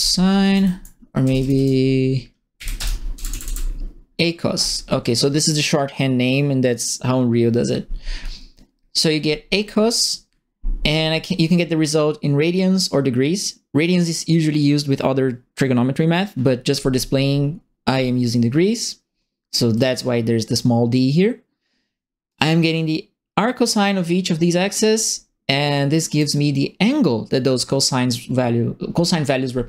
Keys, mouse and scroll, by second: 0.0-1.5 typing, 0.5 ctrl+Left, 2.5 End, 2.7 BackSpace, 3.1 Left, 3.2 Left, 3.4 Left, 4.5 End, 19.7 click, 22.2 right click, 25.1 middle click, 25.9 right click.